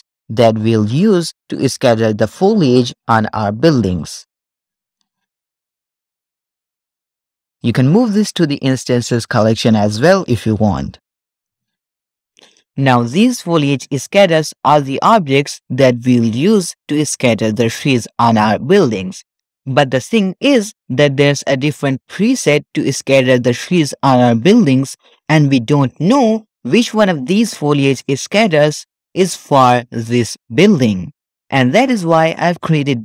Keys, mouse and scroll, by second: 0.5-1.8 scroll up 2, 3.9-4.9 shift+middle drag, 5.2 alt+g, 5.2-5.7 scroll down 1, 5.7 middle click, 5.7 g, 7.0 click, 7.0 x, 11.4 click, 11.8-13.0 scroll up 3, 13.0 scroll down 2, 27.4-28.5 drag, 30.0 click.